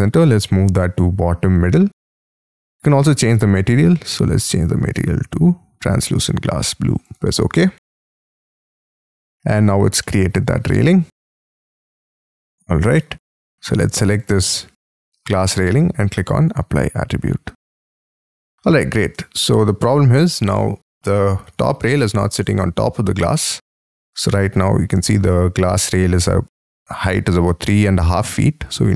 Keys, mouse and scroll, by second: 4.0-5.9 scroll down 11, 10.0 middle click, 10.7 middle click, 11.0-12.4 scroll down 24, 12.4 Escape, 12.9 middle click, 14.5 shift+middle click, 18.1-18.6 scroll up 9, 18.7 middle click, 19.7-20.2 scroll down 1, 20.2 scroll up 1, 20.9 scroll up 1, 21.8 scroll down 5, 22.9 scroll down 1, 25.0 shift+scroll up 2, 28.4 space, 28.6 scroll down 4.